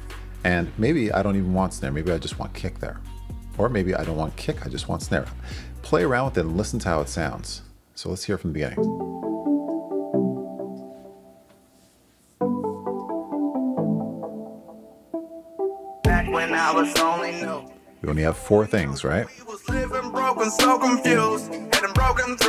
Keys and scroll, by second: 1.8 BackSpace, 4.2 super+z, 8.7 space.